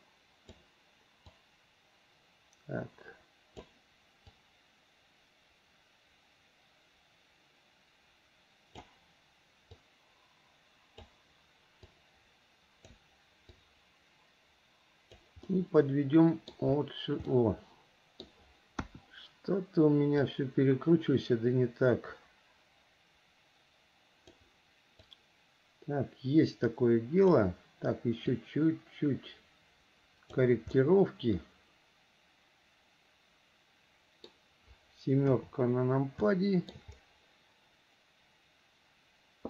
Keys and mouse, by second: 1.5-3.7 drag, 4.5-8.9 drag, 10.1-11.3 drag, 12.1-13.1 drag, 13.7-15.4 drag, 15.6-16.7 middle drag, 17.5 middle click, 18.9 KP_1, 20.5-24.5 drag, 25.1-27.5 drag, 28.4 click, 30.9-34.5 middle drag, 35.4 KP_7, 36.4 shift+middle click.